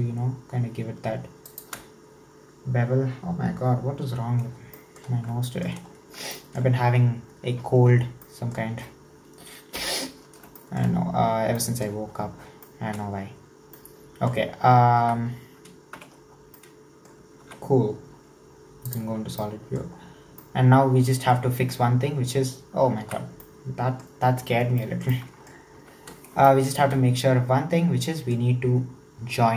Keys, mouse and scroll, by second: 4.4-4.8 scroll down 2, 4.8 shift+middle click, 5.0-5.5 scroll up 2, 5.5 shift+middle click, 5.9-6.4 scroll down 3, 6.4-9.2 shift+middle drag, 9.2-10.6 scroll down 1, 10.6 shift+middle click, 10.9-11.6 scroll up 3, 11.6 shift+middle click, 12.2-12.6 scroll down 4, 12.6 shift+middle click, 13.5 scroll down 2, 13.8-15.1 middle drag, 15.1 Tab, 16.0 /, 16.4 scroll down 2, 16.6 middle click, 17.4 alt+z, 18.9 click, 19.4-19.9 middle drag, 19.9-20.5 scroll up 5, 20.5-21.2 middle drag, 21.2 Tab, 23.1 alt+z, 23.4-25.8 middle drag, 25.8 1, 26.1-26.5 scroll up 3, 26.5-29.5 shift+middle drag.